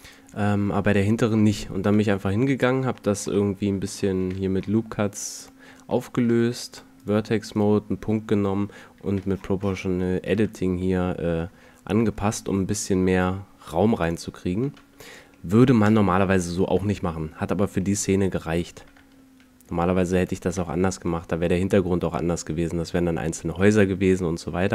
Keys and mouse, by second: 1.8 Tab, 4.1 ctrl+r, 6.2 ctrl+Tab, 9.0 g, 14.2 a, 14.5 Tab, 16.5 KP_0, 18.8 Tab, 19.5 a, 19.9 a, 20.4 Tab, 24.3 middle click.